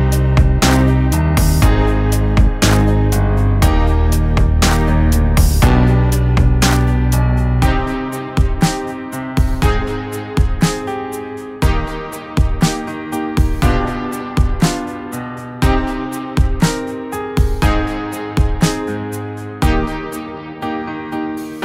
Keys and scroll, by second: 4.5 ctrl+shift+], 9.3 ctrl+[, 9.3 ctrl+], 19.9 ctrl+-, 20.7 ctrl+-.